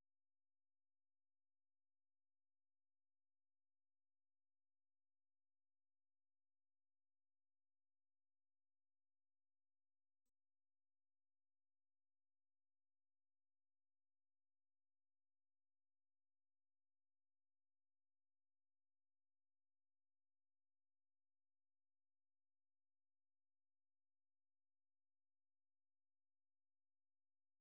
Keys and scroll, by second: 18.5 ctrl+w, 23.0 ctrl+c, 24.4 super+1, 25.7-27.6 typing.